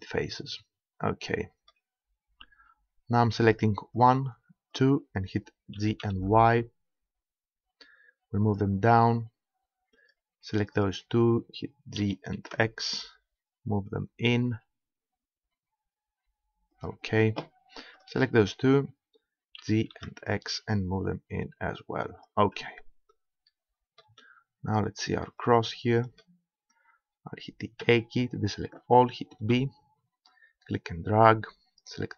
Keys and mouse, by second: 0.7-2.4 middle drag, 3.1 middle click, 4.0-6.5 right drag, 5.8 g, 8.6-9.6 drag, 10.0-12.7 right drag, 12.0 g, 16.8-18.6 drag, 18.0 right click, 18.6 middle click, 18.8-20.1 right drag, 19.6 g, 22.2-23.4 drag, 24.0 click, 25.5 click, 26.3 click, 27.8 a, 29.4 b.